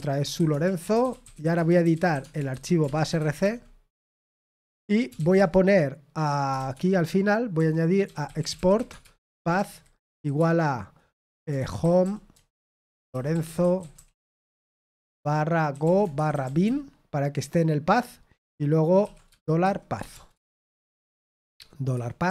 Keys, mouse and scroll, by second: 2.7-3.8 typing, 5.1 typing, 9.0-13.9 typing, 15.0-16.9 typing, 19.3-21.5 typing.